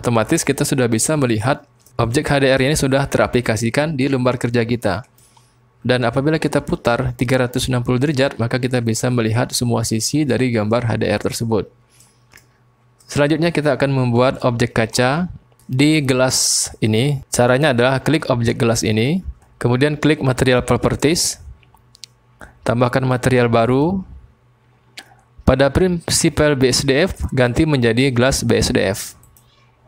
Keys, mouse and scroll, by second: 0.5 middle drag, 0.8 click, 0.9 middle click, 1.0 click, 1.1-1.9 middle drag, 2.1-5.2 middle drag, 6.0-10.8 middle drag, 12.0 click, 12.2 middle click, 14.2 middle click, 15.6 click, 18.7 click, 20.7 click, 23.6 click, 27.4-29.3 drag.